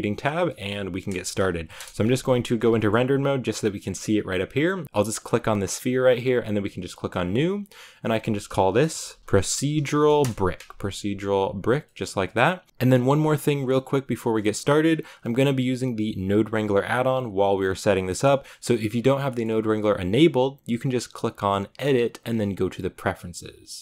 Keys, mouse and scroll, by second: 0.4-1.7 middle drag, 1.7 KP_0, 2.5 z, 2.6 shift+middle click, 2.8-3.7 scroll up 1, 3.7 scroll up 1, 3.8 shift+middle click, 4.1 right click, 4.8 g, 5.1 g, 7.0-10.1 drag, 12.6 click.